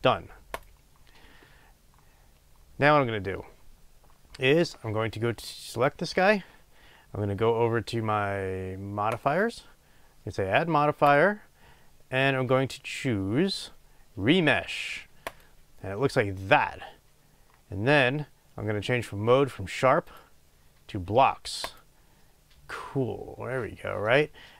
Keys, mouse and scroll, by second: 5.7 drag, 9.1 click, 11.0-24.5 drag.